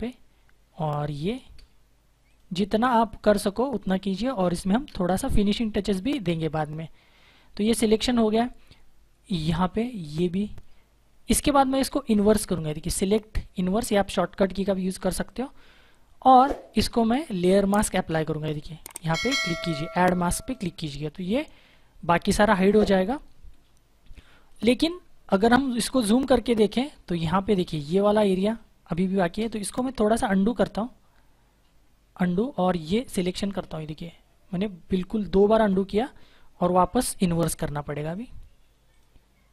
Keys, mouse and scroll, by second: 2.2 click, 3.5 space, 3.7 click, 3.9 space, 6.2 ctrl+-, 9.8 click, 11.1 -, 12.9 click, 20.4 click, 24.0 click, 25.8 ctrl+=, 26.5 space, 26.7 click, 26.9 space, 29.7 ctrl+z, 33.2 click, 37.9 click.